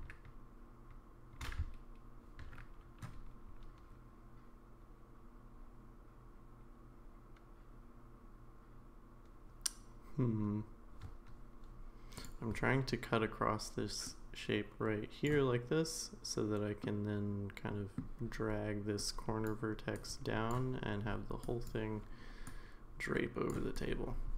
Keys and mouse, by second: 12.2 click, 14.1-15.2 drag, 16.8-18.0 middle drag, 19.0 click, 19.9 click, 21.4 click, 22.6-23.6 drag, 23.7-24.3 drag.